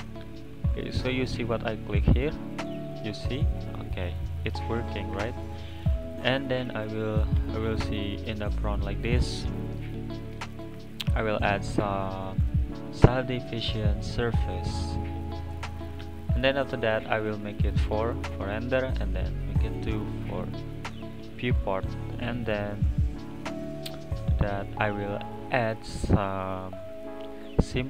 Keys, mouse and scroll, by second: 2.3 click, 2.6 click, 2.7 click, 2.9 click, 3.6 middle drag, 3.8 scroll up 1, 4.0 scroll down 3, 4.1-5.1 middle drag, 5.1 n, 5.3 click, 6.5 click, 7.0 click, 10.3 click, 11.0-14.1 drag, 14.9-15.4 middle drag, 15.4 click, 17.5-19.8 drag, 20.1 click, 22.2 click, 22.5 click, 23.3 click, 23.5 click, 24.9 click, 25.8-27.8 drag.